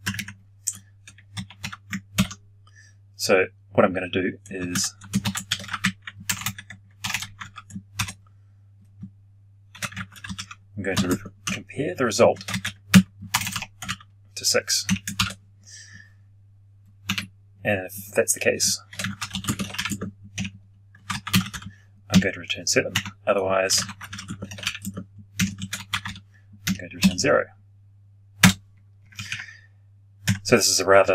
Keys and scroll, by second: 2.0 ctrl+j.